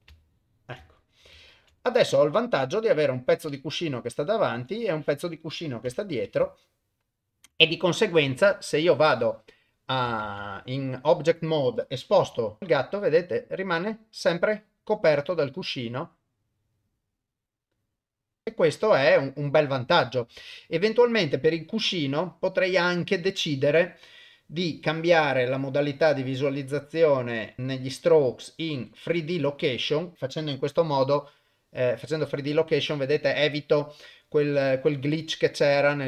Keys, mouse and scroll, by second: 0.3 ctrl+middle click, 0.9 shift+middle click, 1.4 ctrl+middle click, 1.8-4.4 middle drag, 4.5 KP_1, 5.9 KP_0, 6.6 ctrl+middle click, 7.6 shift+middle click, 9.0 click, 10.2 ctrl+Tab, 12.2 g, 12.6 shift+Tab, 21.3 click, 25.1 middle click, 26.0 middle click, 26.7 click, 27.3 middle click, 27.6 middle click, 28.3 click, 30.1 middle click, 30.1 click, 30.1 KP_0, 30.7 g.